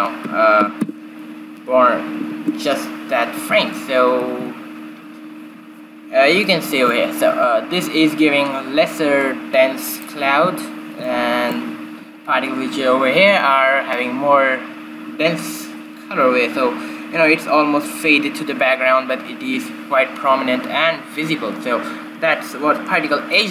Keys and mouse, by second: 0.1-1.9 drag, 3.5 shift+Left, 4.4 alt+a, 5.4 alt+a, 11.0-12.7 right drag, 12.7-13.9 middle drag.